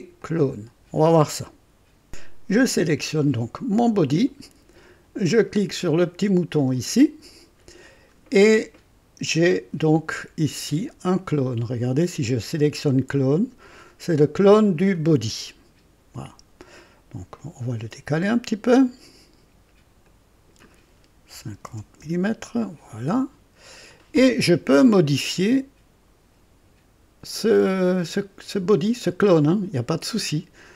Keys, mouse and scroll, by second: 0.1 click, 2.1 click, 3.7 click, 6.7 click, 9.4 click, 11.3 click, 12.7 click, 17.3 click, 18.2 click, 18.8 click, 20.0 click, 21.3 KP_5, 21.6 KP_0, 22.0 Return, 22.0 KP_Enter, 23.7 click, 29.4 click.